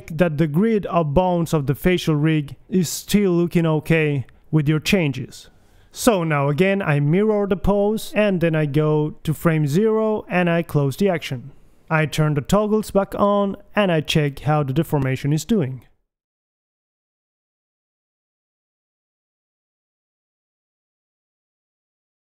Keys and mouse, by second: 0.7 right click, 0.9-2.6 drag, 0.9 g, 1.9 g, 3.4 KP_1, 3.6 a, 4.0 b, 7.3-14.2 drag, 15.0 a, 15.3 alt+g, 15.3 a, 15.6 alt+s, 15.7 a, 15.9 click, 16.9 click, 16.9 g, 18.4 g, 19.0 KP_2, 19.2 KP_1, 20.0 g, 21.7 KP_1.